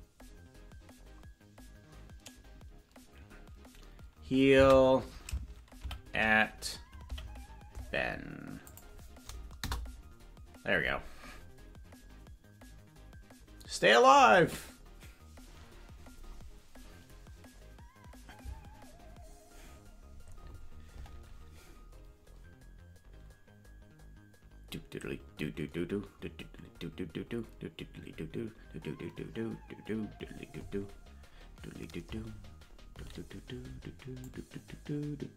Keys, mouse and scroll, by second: 34.3-35.3 drag.